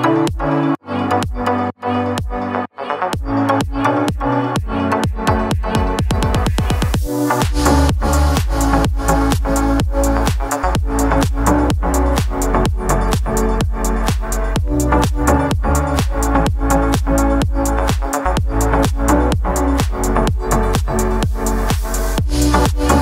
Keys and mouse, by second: 0.2 middle drag, 0.6 ctrl+a, 1.0-1.6 middle drag, 2.4-3.2 drag, 3.2-3.6 middle drag, 4.2 middle click, 4.5 click, 5.5 drag, 6.3 shift+d, 6.6 r, 7.4 ctrl+a, 8.0 click, 8.2 middle drag, 8.5 middle drag, 8.9 middle click, 9.6 ctrl+p, 11.2 click, 11.8-13.0 drag, 14.1 drag, 14.6 middle click, 14.8 middle click, 15.4 click, 15.7-16.5 middle drag, 17.1-17.4 drag, 17.4 r, 18.2 shift+middle click, 18.7 shift+d, 19.1 ctrl+z, 19.3 shift+click, 19.7 shift+d, 20.1 click, 21.0 middle click, 21.6 middle drag, 22.0 r, 22.7 middle drag.